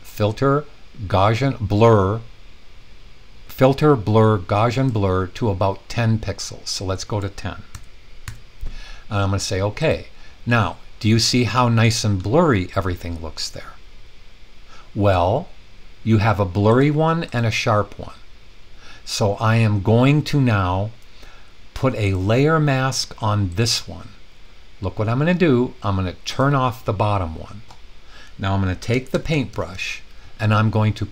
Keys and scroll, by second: 7.7-8.2 typing, 28.8-29.6 typing.